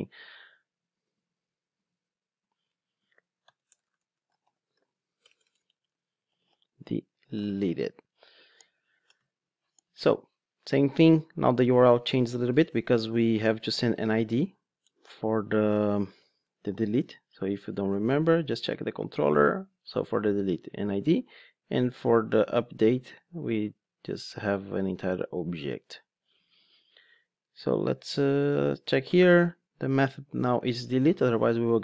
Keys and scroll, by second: 17.4 super+1, 25.8 ctrl+Tab, 30.7 Return.